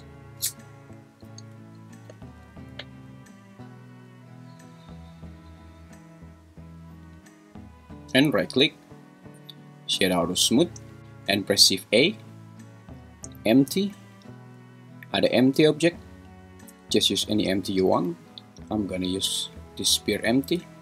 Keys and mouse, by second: 8.6-9.8 right drag, 11.0 Escape, 11.5 shift+a, 20.4 g.